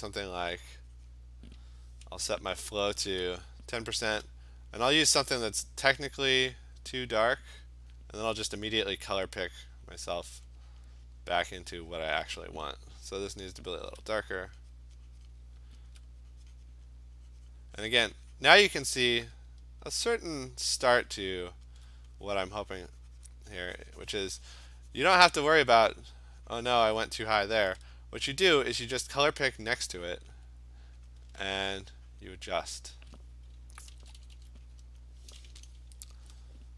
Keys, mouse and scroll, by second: 0.1 click, 0.5 click, 0.9 click, 1.2 click, 4.1 alt+click, 4.2 alt+click, 7.3 click, 8.0 click, 10.2 click, 10.8 click, 11.6 click, 12.1 click, 13.9 alt+click, 14.1 alt+click, 15.3 click, 15.9 alt+click, 16.9 click, 17.5 click, 18.5 click, 19.1 click, 19.2 alt+click, 21.8 alt+click, 22.0 alt+click, 25.3 click, 25.6 click, 26.9 click, 28.2 alt+click, 29.4 alt+click, 30.3 click, 31.1 click, 31.6 alt+click, 32.3 click, 32.7 click, 33.9 [, 34.1 [, 34.4 [, 35.0 click.